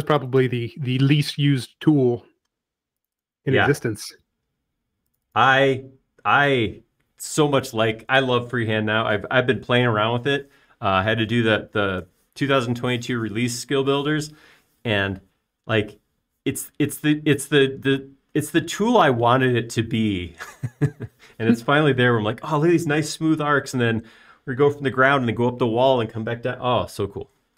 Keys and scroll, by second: 7.7 space.